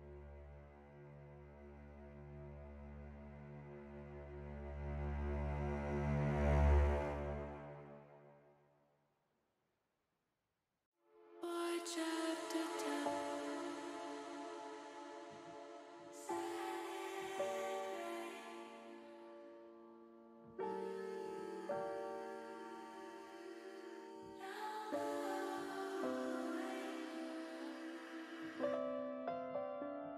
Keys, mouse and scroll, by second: 0.1-2.0 drag, 2.5 middle click, 3.6 ctrl+z, 4.6 click, 6.6-7.6 drag, 8.1 middle click, 9.4 click, 10.5 ctrl+z, 10.8 ctrl+z, 11.4 ctrl+z, 11.9 ctrl+z, 12.7 middle click, 14.2 e, 14.6 s, 16.4 click, 17.6 s, 18.5 click, 19.6 s, 20.4 click, 21.3 click, 22.3 click, 23.2 middle click, 24.5 middle click, 25.6 middle click, 26.0 middle click, 26.5 shift+middle click, 27.0 middle click, 28.9 middle click.